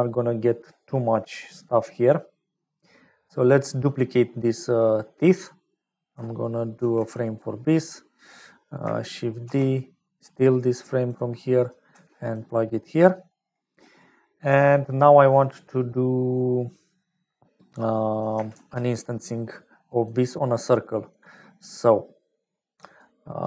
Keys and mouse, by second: 3.5 middle click, 4.8 click, 6.7 ctrl+j, 7.4 click, 8.6 click, 9.4 shift+d, 11.9 g, 13.7 click, 18.5 shift+a, 22.9 click.